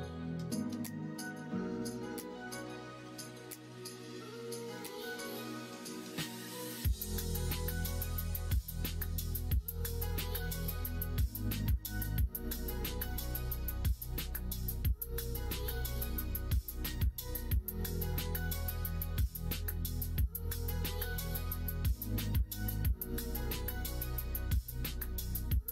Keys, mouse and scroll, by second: 3.5 middle click, 4.2 middle click, 4.9 middle click, 5.5 middle click, 5.9 alt+z, 7.2-8.6 middle drag, 10.8-12.9 typing, 13.3 middle click, 14.2 3, 15.0 shift+click, 15.5 shift+click, 17.2 ', 18.2 ', 19.5 middle click, 20.5 r.